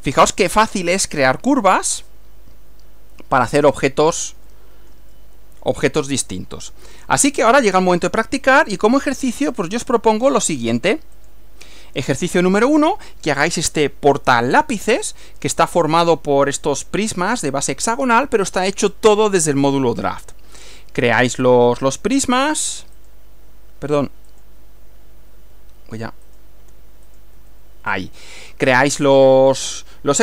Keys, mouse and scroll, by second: 1.0-4.3 middle drag, 4.5-5.9 shift+middle drag, 6.2-8.0 middle drag, 8.7 click, 9.6 click, 11.3 click, 23.0 click, 24.3 click, 26.3 click, 26.7 Right, 27.1 click, 27.4 Right.